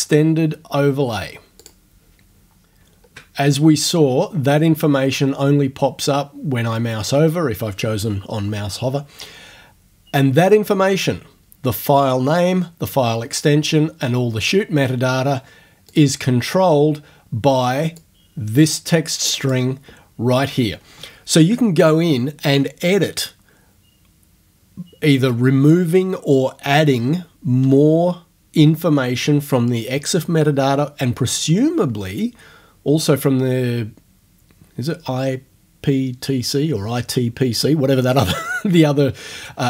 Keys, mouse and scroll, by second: 1.6 click, 2.7 ctrl+scroll down 1, 15.9 click, 18.0-19.7 drag.